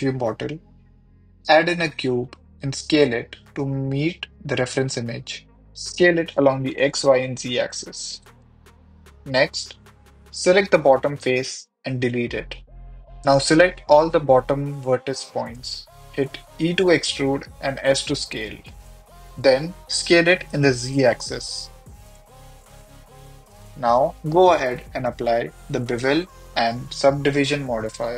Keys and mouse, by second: 0.7-3.6 typing, 1.7 click, 3.5 click, 4.9 KP_1, 6.0-7.9 typing, 9.1 s, 9.2 x, 9.4 y, 11.2 Tab, 11.4 ctrl+r, 11.5 click, 11.8 ctrl+r, 11.8 click, 11.8 click, 12.3 3, 13.0 x, 13.5 1, 13.7 click, 15.3 Tab, 15.5 ctrl+a, 15.9 Tab, 16.1 e, 16.2 s, 17.5 click, 17.6-18.1 right drag, 18.4 s, 18.9 click, 19.0 KP_1, 19.5 click, 20.9 s, 21.9 click, 21.9 e, 22.0 z, 23.1 click, 23.3 Tab, 23.6 click, 23.7 h, 24.2 right click, 24.7 click, 25.5-25.9 drag, 26.1 drag, 27.2 click, 28.0 click.